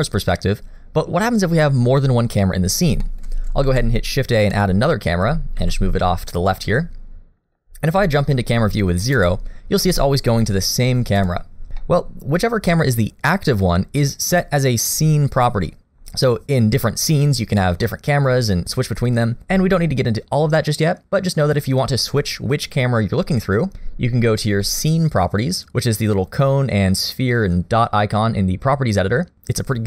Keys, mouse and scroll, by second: 3.0 shift+middle click, 3.7 shift+a, 4.9 scroll down 1, 5.1 middle click, 5.6 g, 6.6 middle click, 9.2 KP_0, 9.8 KP_0, 10.7 KP_0, 11.2 KP_0, 11.8 shift+middle click, 25.6 click.